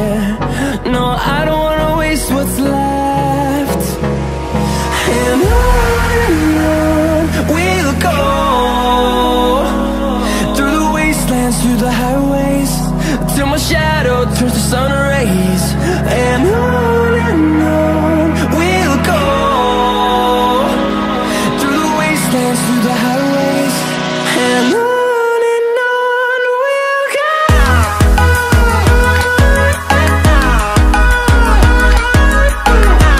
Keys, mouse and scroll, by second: 0.9-1.6 shift+middle drag, 1.6-2.9 scroll up 7, 2.9 s, 5.7-6.0 scroll down 1, 6.0 shift+middle click, 6.7-7.3 scroll up 2, 7.3 shift+middle click, 7.6-8.7 scroll up 10, 8.7 shift+middle click, 9.3-10.8 scroll up 1, 10.8-11.8 scroll up 1, 11.8 scroll up 1, 11.9 s, 16.4 click, 17.0-17.3 scroll down 2, 17.5-19.2 middle drag, 19.2 scroll down 1, 20.3 shift+click.